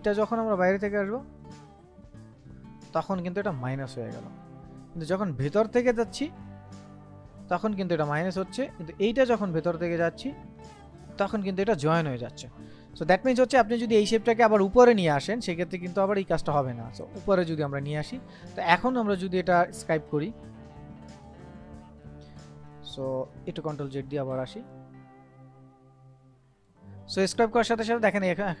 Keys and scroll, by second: 4.3 ctrl+z, 8.4 ctrl+z, 13.0 ctrl+z, 23.4 ctrl+z.